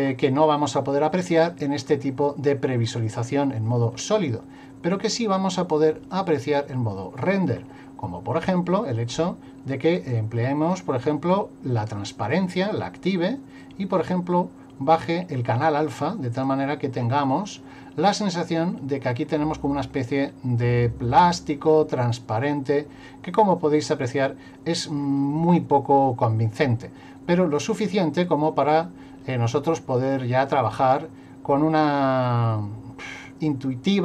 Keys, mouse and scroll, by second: 0.0 scroll down 2, 2.8-3.6 scroll up 3, 3.6 middle click, 4.9 click, 10.0 click, 13.6 click, 15.9 click, 18.8 middle click, 19.6 middle click, 28.8 middle click.